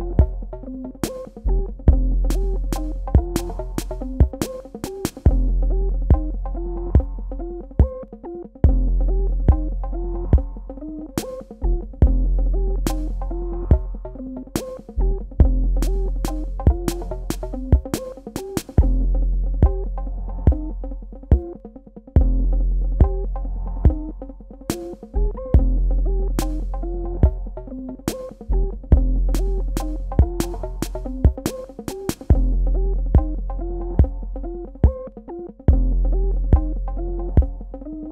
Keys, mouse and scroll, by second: 8.3 Tab, 11.5 p, 13.8 click, 37.0 ctrl+z, 37.4 click.